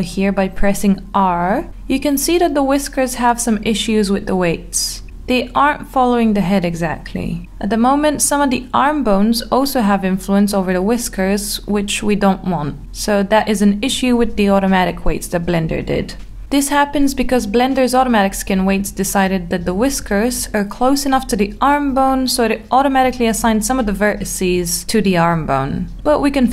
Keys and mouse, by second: 0.7 r, 1.3 x, 2.2 z, 5.2 click, 5.8 middle click, 8.0 click, 10.6 r, 13.1 click, 14.1 ctrl+z, 14.5 ctrl+z, 16.3-17.2 shift+middle drag, 17.3 middle click.